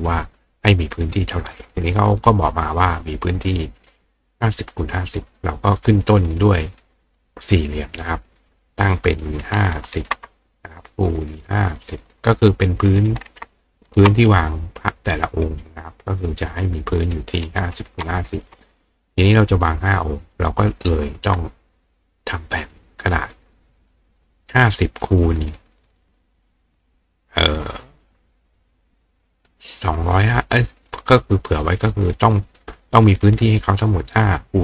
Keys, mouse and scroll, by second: 4.3 click, 5.8-7.5 drag, 8.4 click, 11.5 click, 15.2 click, 16.2 click, 20.9 click, 26.8 click.